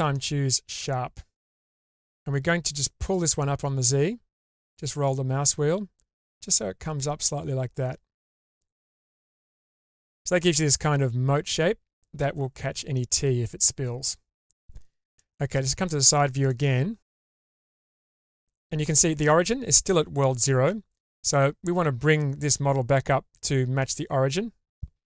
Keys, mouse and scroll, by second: 2.1-2.6 scroll up 1, 3.2 click, 10.2 middle click, 12.9-14.1 middle drag, 15.3 middle click, 16.5 shift+middle click, 18.2 Tab, 25.0 middle click.